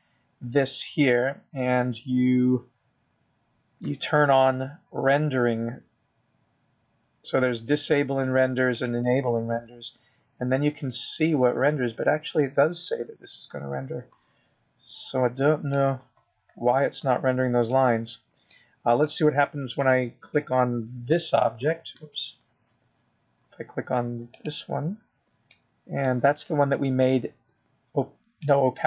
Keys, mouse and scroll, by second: 2.0 click, 18.1 middle click, 20.9 middle click, 22.2 click, 26.7 click, 28.0 middle click.